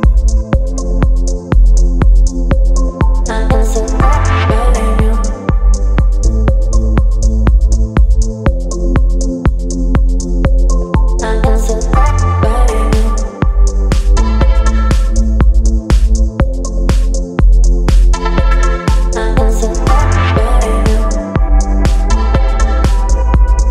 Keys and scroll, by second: 2.4 space, 4.3 b, 4.7 ], 5.4 ], 12.7 space.